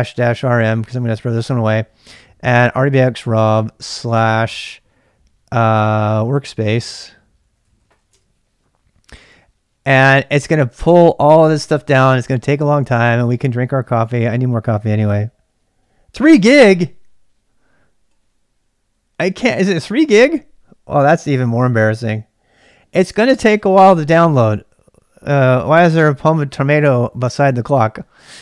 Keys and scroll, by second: 0.0-4.0 typing, 5.9-8.6 typing, 10.4 typing.